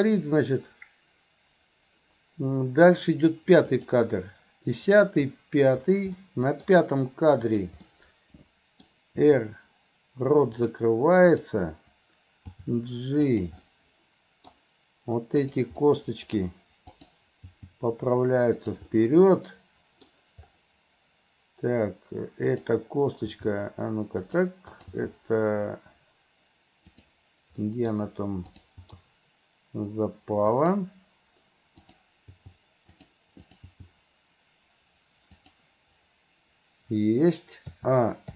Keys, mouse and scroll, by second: 3.8 click, 6.3-6.7 middle drag, 7.5 click, 7.9-8.9 middle drag, 9.2 r, 11.3 click, 12.5 g, 13.7-14.5 middle drag, 13.7 scroll up 1, 15.4 click, 15.9 scroll up 1, 15.9-16.4 middle drag, 16.4 scroll down 1, 17.0 click, 17.5 g, 18.9-20.1 middle drag, 20.1 scroll down 1, 22.5 click, 23.2 g, 24.7 click, 25.1 g, 27.6 scroll up 1, 27.7 middle click, 28.5 click, 28.9 g, 31.8 click, 32.3 g, 33.5 click, 33.8 g, 37.8 a.